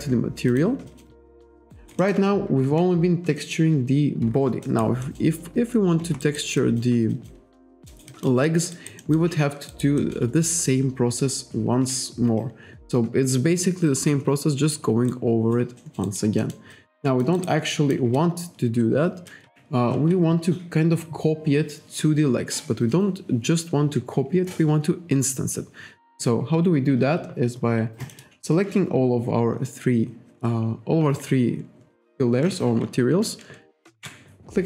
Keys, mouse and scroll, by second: 0.1 scroll up 1, 0.6 click, 0.9 alt+click, 1.2 alt+scroll up 1, 1.4 alt+middle click, 1.8 alt+right click, 2.1 alt+middle click, 4.7 alt+right click, 5.1 alt+middle click, 6.3 alt+right click, 6.7 alt+click, 7.2 alt+click, 8.0 alt+right click, 8.2 alt+click, 8.5 alt+middle click, 8.8 alt+right click, 9.1 alt+middle click, 9.8 alt+right click, 10.1 alt+middle click, 15.2 alt+right click, 15.9 alt+middle click, 16.1 alt+right click, 16.5 alt+middle click, 16.8 alt+click, 17.8 alt+click, 28.1 shift+click, 34.0 ctrl+g.